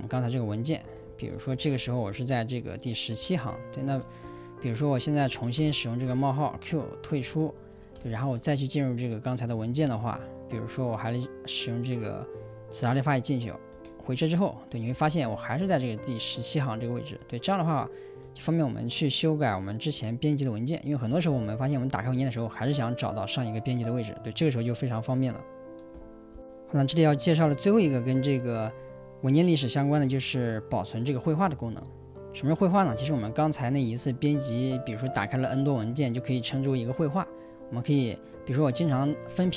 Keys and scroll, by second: 0.0-8.8 typing, 7.3 Return, 10.7 j, 13.8 Return, 14.8-18.4 typing, 21.0-22.6 typing.